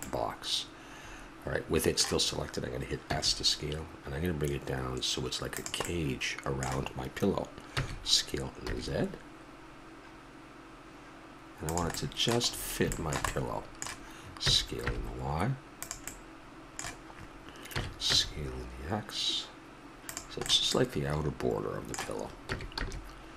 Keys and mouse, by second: 3.0 s, 5.9-6.6 middle drag, 7.7 s, 11.9-13.3 middle drag, 14.4 s, 17.7 s, 22.5 s.